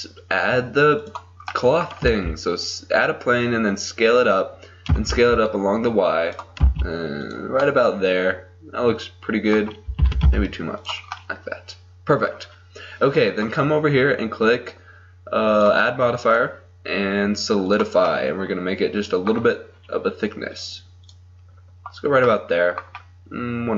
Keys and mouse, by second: 2.1 s, 4.9 s, 6.7 s, 7.8-9.9 middle drag, 10.1 s, 11.2 middle click, 13.2 middle click, 13.4-18.1 drag, 18.1-20.6 middle drag, 20.6-22.5 drag, 22.5 middle click.